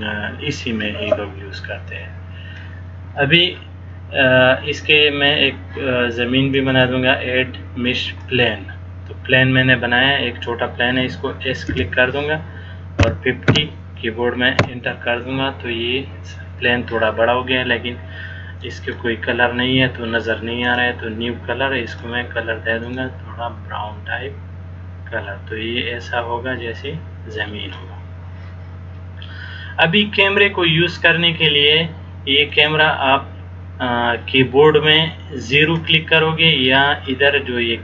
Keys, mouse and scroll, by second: 6.8 click, 18.8 click, 22.0 click, 32.7 click.